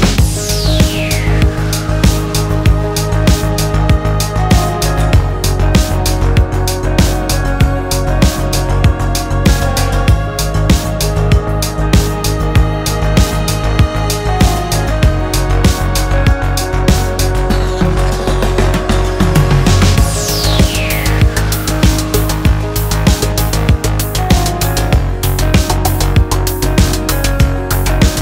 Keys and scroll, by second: 0.0-1.5 typing, 2.7 Return, 4.8 super++, 9.1 super+-, 16.1-16.9 typing, 18.1-21.0 typing, 22.9-25.7 typing, 24.3 Tab.